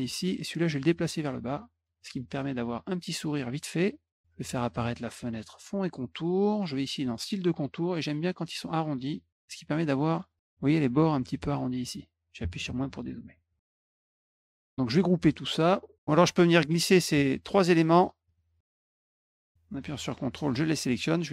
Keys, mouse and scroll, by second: 0.4 ctrl+click, 2.3 click, 3.6 click, 5.0 click, 6.6 click, 8.0 click, 9.2 click, 9.3 middle click, 9.4-9.9 scroll up 3, 9.8 middle click, 13.6 middle click, 13.7 middle click, 14.0 drag, 15.6 click, 16.2 click, 16.7 shift+click, 17.2 shift+click, 17.7 shift+click, 18.8 ctrl+click, 19.1 ctrl+click, 20.3-21.3 drag.